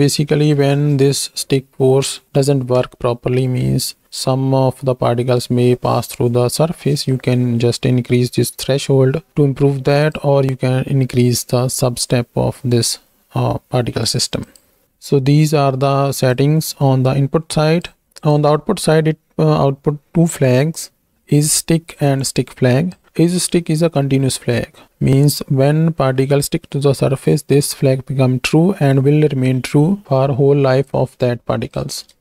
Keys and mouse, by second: 10.0 click, 14.4-17.8 drag, 18.3-23.0 drag, 31.1 click.